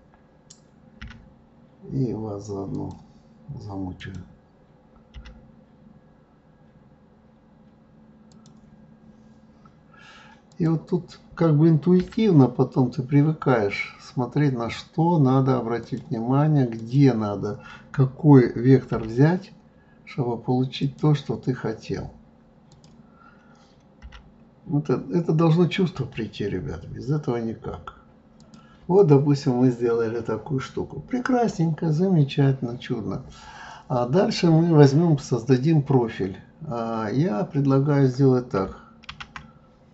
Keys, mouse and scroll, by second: 1.0 g, 4.0 click, 5.1 g, 10.5 click, 12.0 g, 16.7 click, 18.9 g, 22.7 click, 24.0 g, 28.9 click, 39.1 shift+a.